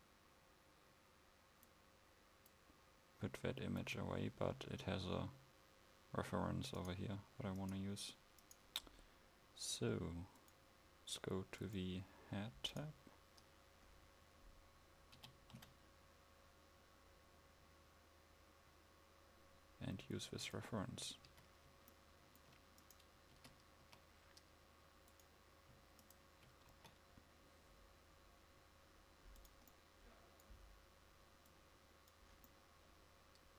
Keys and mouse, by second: 10.5 click, 15.3 g, 21.4 a, 23.6 Tab, 23.9 a, 26.9 s, 32.6 click, 33.0 click.